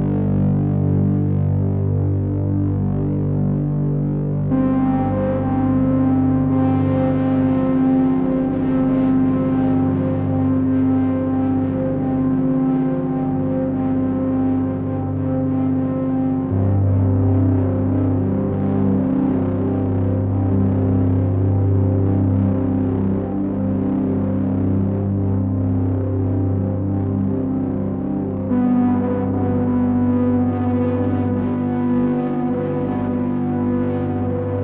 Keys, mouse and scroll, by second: 0.5 click, 7.4 Tab, 11.0 click, 12.5 Tab, 34.1 click.